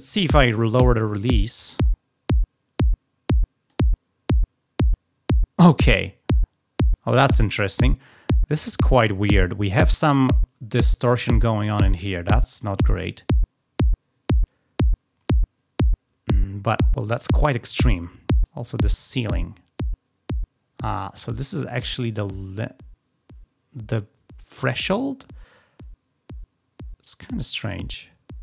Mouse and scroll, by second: 0.4-3.6 drag, 18.3-28.4 drag.